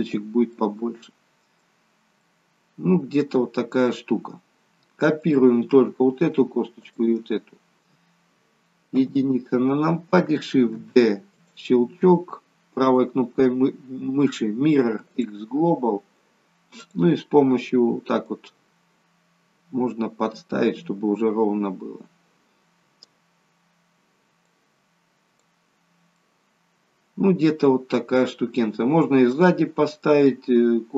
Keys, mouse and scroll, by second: 0.4 middle click, 1.8 scroll down 1, 2.2 middle click, 5.2 click, 6.6 shift+click, 8.9 KP_1, 10.6 shift+d, 12.9 right click, 16.7 click, 18.3 click, 24.3 click, 26.1 middle click, 29.3 middle click.